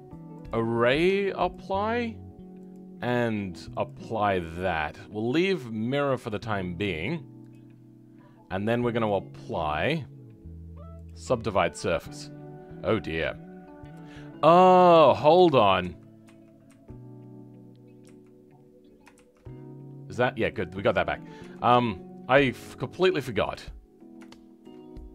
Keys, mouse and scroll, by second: 1.5-12.0 drag, 12.0 scroll up 2, 14.9 ctrl+z, 15.3 ctrl+z, 19.1 ctrl+shift+z, 20.1 scroll down 2, 20.5 middle click, 21.4 Tab, 21.8-23.2 shift+middle drag, 23.2 click, 23.5 scroll up 2, 24.2 shift+middle click, 24.8 scroll up 2.